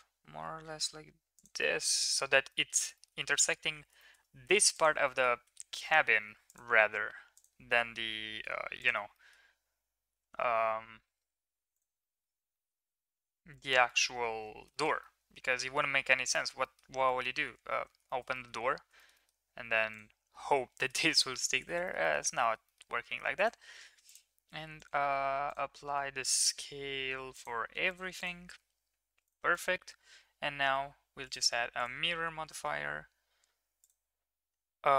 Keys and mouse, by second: 1.7 middle click, 2.6 middle click, 2.9 shift+middle drag, 4.1 shift+middle click, 4.7 click, 5.0 middle drag, 5.4 Tab, 6.4 click, 7.8 g, 9.1 middle click, 12.1 middle click, 12.6 middle click, 13.1 Tab, 13.5 click, 13.8 middle drag, 14.3 ctrl+s, 14.6 shift+middle drag, 15.0-15.7 middle drag, 16.3 middle drag, 16.6 middle click, 17.0 middle drag, 17.7 ctrl+s, 18.0 middle drag, 18.9 shift+middle drag, 19.1 middle click, 20.9 shift+middle click, 21.2 ctrl+middle click, 21.4 ctrl+s, 21.8 middle click, 22.0 middle click, 22.4 shift+middle click, 22.6 middle click, 23.4 click, 23.7 ctrl+a, 24.8 click, 25.0 ctrl+a, 25.8 ctrl+a, 27.3 click, 27.6 ctrl+a, 28.1 click, 29.4 click, 31.2 click, 31.7-33.9 drag.